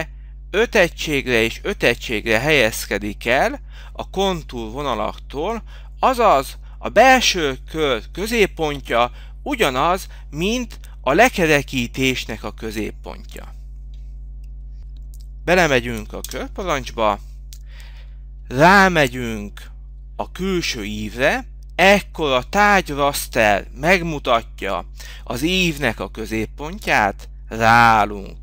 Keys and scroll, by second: 2.0 3, 4.7 Return, 8.4 t, 9.2 Return, 12.4 Return, 14.5 Return.